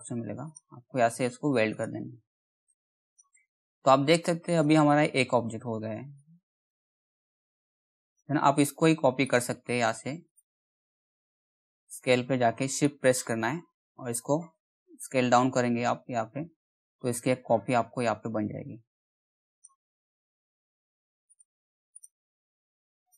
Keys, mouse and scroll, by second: 1.3 right click, 2.2 click, 6.8 ctrl+z, 7.6 click, 12.4 shift+click, 20.9 click, 23.0-23.1 scroll down 1.